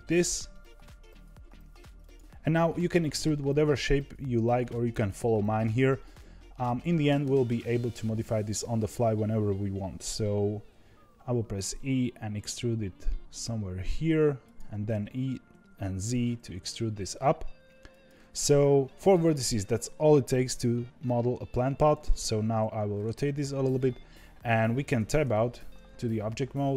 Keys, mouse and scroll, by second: 10.6 e, 22.0-24.8 middle drag, 24.8 Tab.